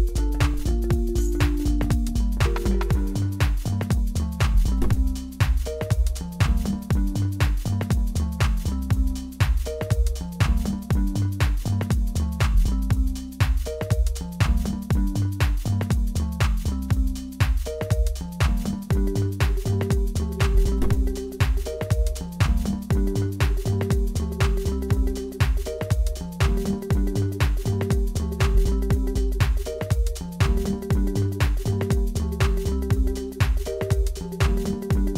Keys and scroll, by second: 1.9 3, 2.6 y, 3.1 ctrl+r, 7.6 2, 8.8 Delete, 11.0 Tab, 11.4 a, 13.7-15.0 typing, 13.8 Return, 17.3 typing, 17.3 Return, 18.6-21.4 typing, 23.7 Tab, 28.1 Tab, 28.7 Delete, 29.0 Tab, 29.5 Tab, 34.1 shift+y, 34.4 ctrl+r.